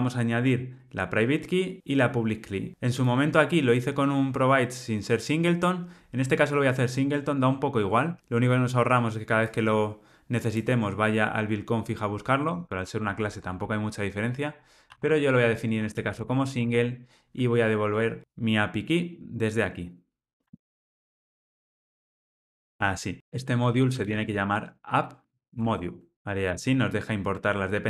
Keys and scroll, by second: 20.4 super+c, 25.7 Escape, 26.1 alt+Return.